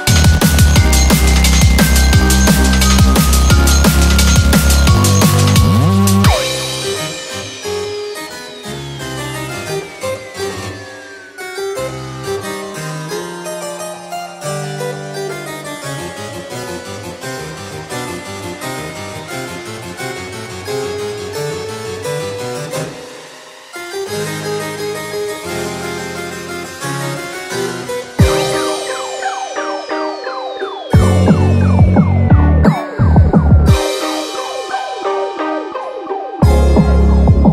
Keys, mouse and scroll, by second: 1.9 click, 1.9-2.2 scroll down 1, 2.2 click, 3.0 s, 12.2 Tab, 14.1 alt+z, 15.1 click, 16.1 g, 25.9 click, 27.2 s, 35.6 click, 36.5 g.